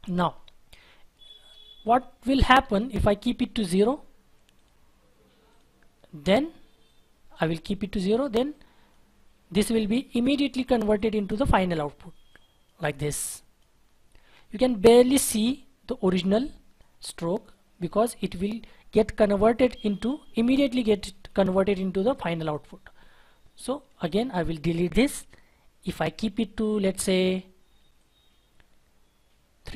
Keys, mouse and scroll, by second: 0.2-0.8 scroll down 1, 0.8-2.6 scroll up 1, 2.8 Delete, 7.9-8.5 scroll down 1, 9.3 scroll up 1, 11.4-12.4 scroll down 1, 24.0 double click, 24.7 Delete.